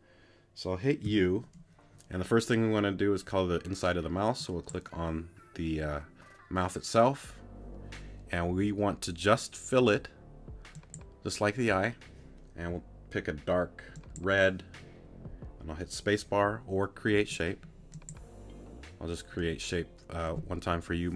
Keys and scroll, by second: 1.0 u.